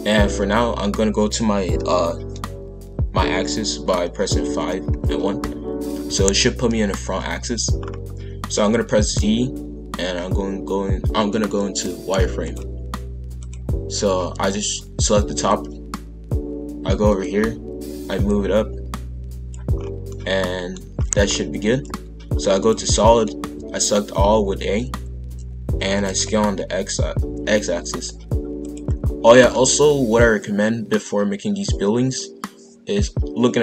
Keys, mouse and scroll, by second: 4.4 KP_5, 4.9 KP_1, 7.8-8.7 scroll up 1, 8.7 z, 13.4 click, 14.2 b, 17.1 click, 19.8-20.1 scroll down 2, 20.1 middle click, 20.9 scroll down 1, 21.2-21.8 scroll up 1, 21.8 z, 23.0 middle click, 23.4 a, 25.8 s, 29.2-32.4 middle drag.